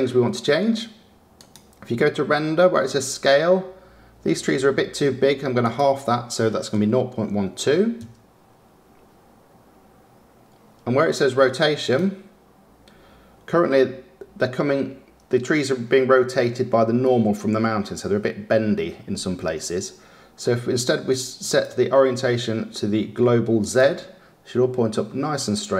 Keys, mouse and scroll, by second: 8.5 click, 24.4 click.